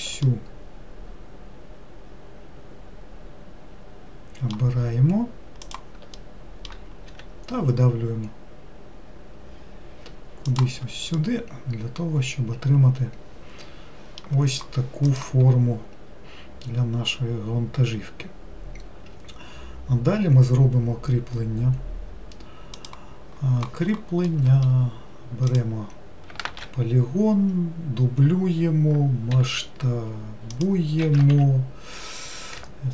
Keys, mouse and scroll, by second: 0.5-3.6 middle drag, 5.9 shift+click, 6.4 middle click, 7.3 e, 11.4-14.4 middle drag, 24.5-25.7 middle drag, 25.7 click, 26.7 shift+d, 31.3 s.